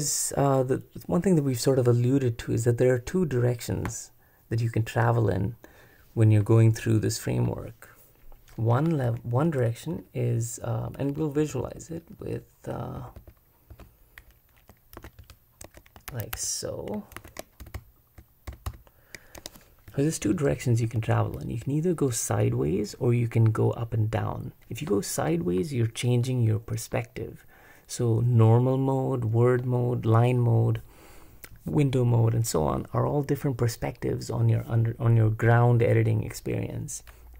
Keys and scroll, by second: 9.0 super+b, 9.6 /, 11.4 ctrl+n, 11.7 ctrl+n, 12.2 ctrl+p, 13.0 ctrl+n, 13.8 ctrl+m, 15.0 super+v, 15.6 super+v, 16.1 super+w, 17.2 super+v, 17.6 shift+k, 17.7 super+v, 18.0 super+v, 19.4 Escape, 19.6-21.6 typing.